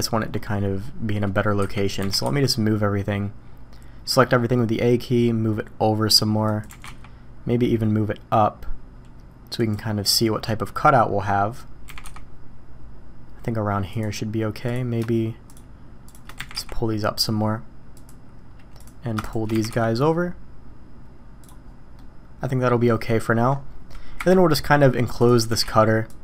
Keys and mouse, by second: 1.6 a, 2.0 g, 6.7 g, 11.8 g, 14.7 drag, 15.5 shift+click, 16.4 g, 19.5 g, 22.0-22.7 drag, 24.2 KP_1, 25.2 click, 25.5 g.